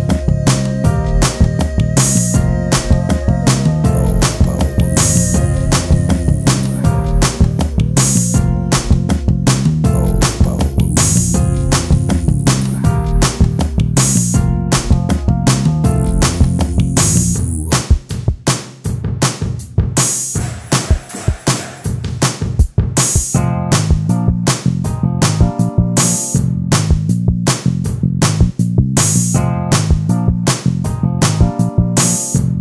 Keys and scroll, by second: 0.3 t, 1.3 l, 2.9 ctrl+space, 3.0 e, 5.3 space, 6.0 space, 6.6 ctrl+t, 7.4-9.6 typing, 11.2 ctrl+space, 11.5 t, 12.7 space, 13.9 ctrl+space, 14.1-17.1 typing, 18.9 ctrl+space, 20.1 ctrl+x, 21.9 t, 23.7 space, 24.5 space, 30.9 t, 32.5 ctrl+space.